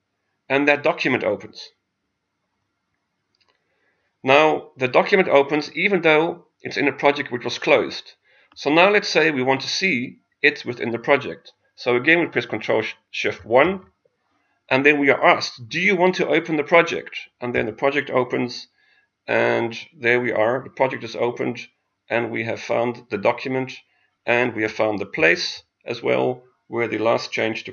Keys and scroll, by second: 13.6 ctrl+shift+1, 25.2 ctrl+q.